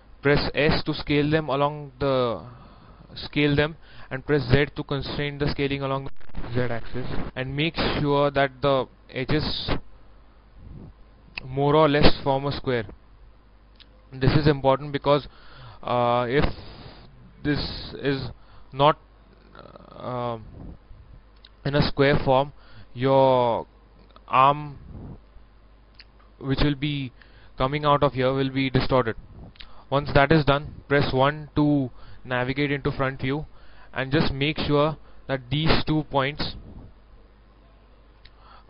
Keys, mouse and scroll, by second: 0.7 s, 6.9 z, 10.2 click, 10.8-16.1 middle drag, 11.9 scroll up 1, 24.5 click, 25.6 middle click, 31.2 KP_1, 32.3-32.9 scroll up 1, 33.1 shift+middle click, 34.6-38.6 drag.